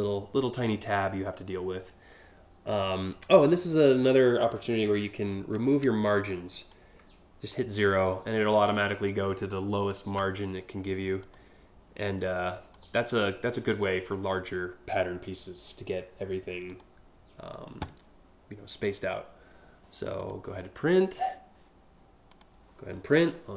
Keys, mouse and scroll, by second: 3.0-4.0 drag, 5.9 click, 7.1 click, 8.7 click, 10.8 click, 12.3 click, 16.2 click, 19.7 click, 21.9 click.